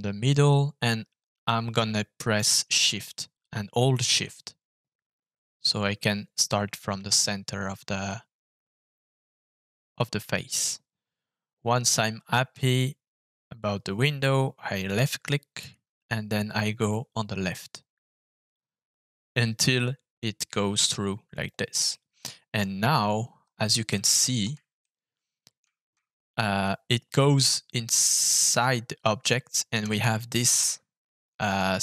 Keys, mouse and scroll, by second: 14.8-17.6 shift+drag, 21.3 click, 21.9 middle click, 22.8-23.8 scroll up 7, 23.9 shift+middle click, 24.8-25.9 middle drag, 26.1-27.2 scroll down 3, 27.4 scroll down 1, 27.4-29.3 middle drag, 29.9 shift+middle click, 31.4 middle click.